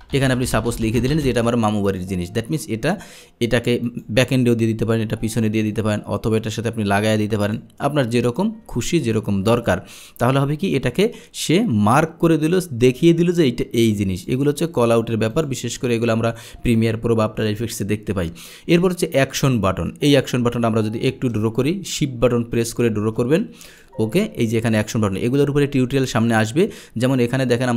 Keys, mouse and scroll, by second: 1.9 click, 3.9 click, 5.7 click, 8.3 click, 14.2 click, 15.3 click, 20.1 click, 20.6-22.9 drag, 23.7 click, 26.1 click.